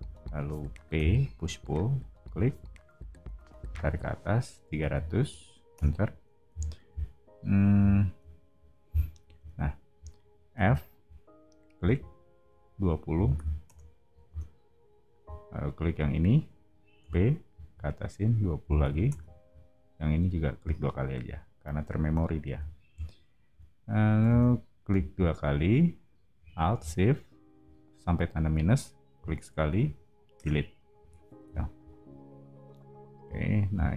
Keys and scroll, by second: 0.9 p, 4.4-5.4 typing, 5.7 Return, 6.4 o, 9.3 space, 10.5 f, 12.9-14.2 typing, 17.0 p, 18.3-19.3 typing, 22.0 space, 22.4 o, 24.2 space, 30.3 BackSpace, 31.4 o.